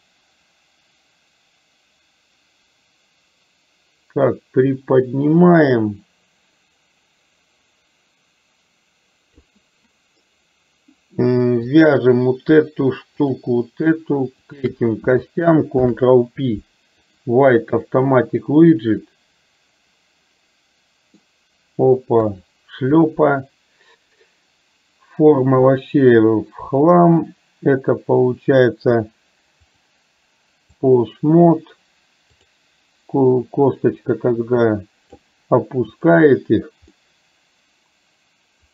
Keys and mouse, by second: 0.0-9.5 drag, 11.9 click, 14.5 shift+click, 15.9 ctrl+p, 18.5-21.4 middle drag, 22.3 KP_3, 29.8-31.0 drag, 33.4-35.3 drag, 35.9 click, 37.0-38.7 middle drag.